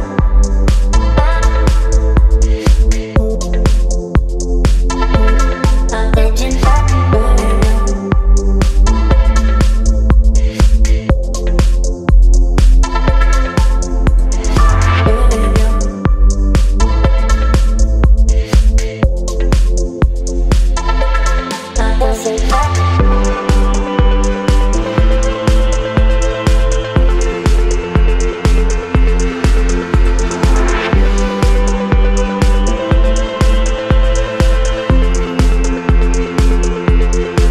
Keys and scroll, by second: 2.3 Right, 3.8 space, 9.4 space, 12.8 space, 19.3 Delete, 22.6 space, 25.8 space, 37.4 Up.